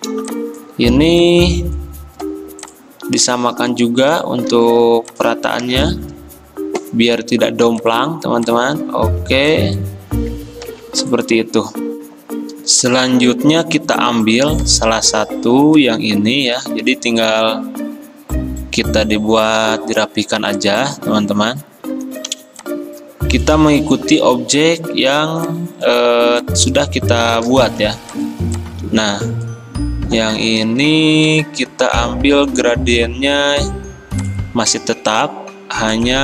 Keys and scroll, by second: 4.6 ctrl+g, 10.8 ctrl+g, 11.9 alt+Tab, 22.4 r, 24.3 o, 27.9 v.